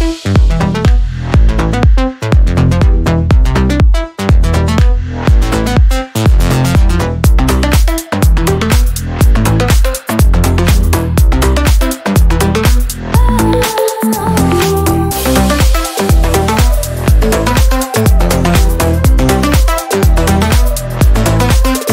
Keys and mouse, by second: 0.3-3.6 middle drag, 3.6-5.2 drag, 5.2-10.4 middle drag, 10.4-13.1 drag, 13.1-14.6 middle drag, 14.6 click, 15.2 click, 16.4-19.6 drag, 19.6-21.9 middle drag.